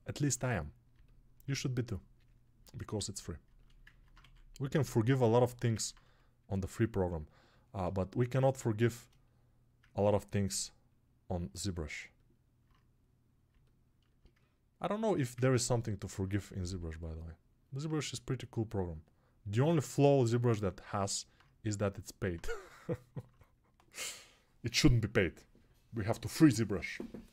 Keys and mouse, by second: 0.0 alt+click, 0.1-1.3 right drag, 1.3-4.0 ctrl+alt+drag, 4.0 alt+right click, 4.9 alt+click, 5.1 right click, 5.4 ctrl+alt+shift+click, 5.8-7.7 right drag, 7.7-27.3 shift+drag.